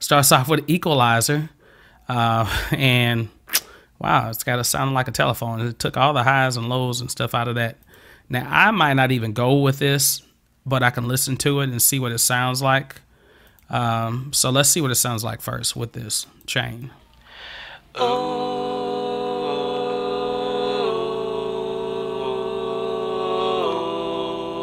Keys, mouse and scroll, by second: 7.9 click, 10.9 click, 13.5 click, 16.3 click, 16.9 click.